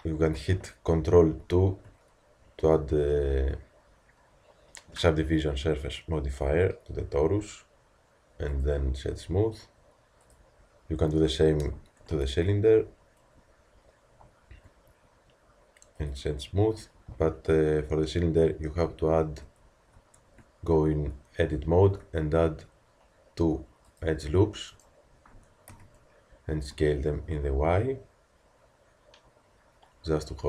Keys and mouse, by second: 1.4 ctrl+2, 7.4 t, 9.1-12.2 drag, 9.1 t, 12.2 ctrl+2, 16.6 t, 19.5 ctrl+r, 20.3 Tab, 21.7 ctrl+r, 25.7 z.